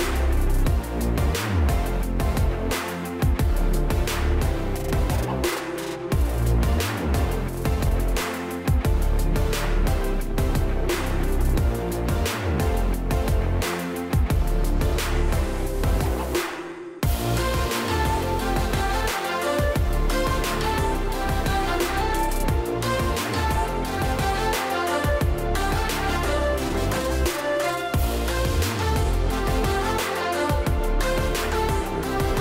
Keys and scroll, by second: 4.6 ctrl+0, 10.3 ctrl+space, 10.7 ctrl+space, 10.8 ctrl+space, 28.8-30.3 ctrl+space.